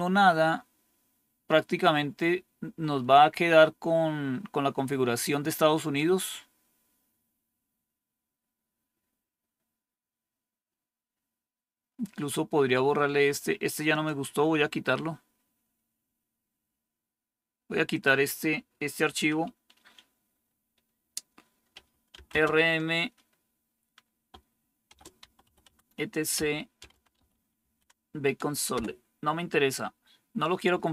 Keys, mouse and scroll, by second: 13.8 click, 17.8 click, 21.6-22.2 typing, 24.5-28.6 typing, 30.8-30.9 typing.